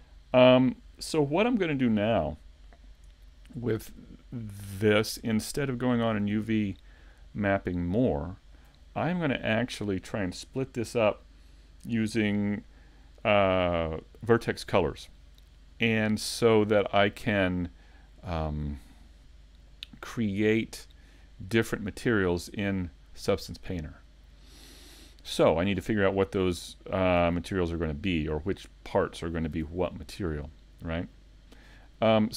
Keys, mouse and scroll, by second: 5.8 click, 6.6 middle click, 7.6 shift+middle click, 8.3 middle click, 19.3 middle click, 23.7 middle click, 26.3 scroll up 1, 27.6 middle click, 29.6 Tab, 30.2 middle click.